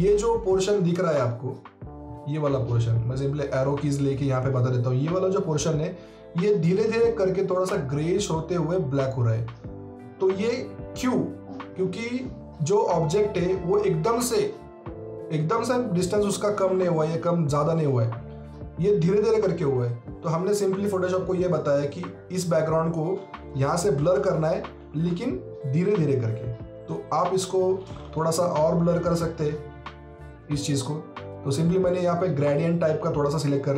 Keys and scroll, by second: 23.3-24.9 typing.